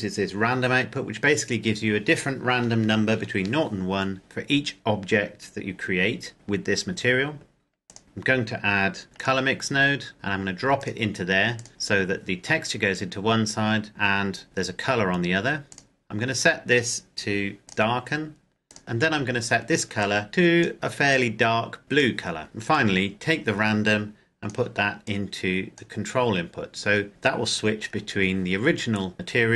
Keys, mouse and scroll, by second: 7.8 click, 9.1 click, 10.7 click, 11.8-13.6 scroll down 1, 15.4-15.8 scroll up 1, 15.8 click, 17.8 click, 22.7 click, 27.8 scroll down 1.